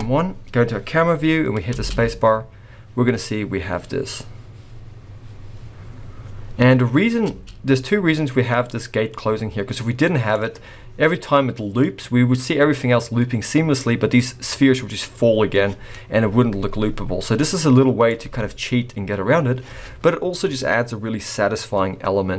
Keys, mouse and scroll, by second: 1.7 space, 7.3 space, 8.0-9.1 scroll up 1, 9.1 click, 17.4 click, 18.2 space.